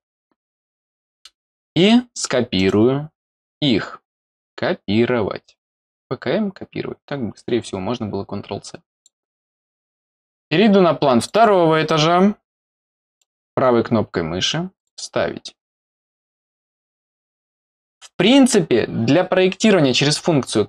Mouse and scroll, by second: 2.5 right click, 8.9 click, 11.2 click, 11.3 click, 14.7 click.